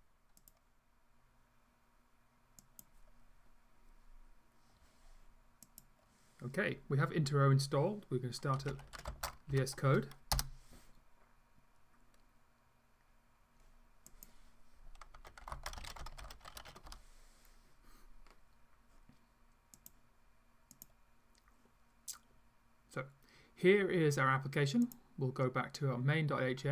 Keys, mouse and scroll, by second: 5.7 click, 8.4-9.5 typing, 10.4 Return, 20.1 click, 20.8 click, 24.9 click.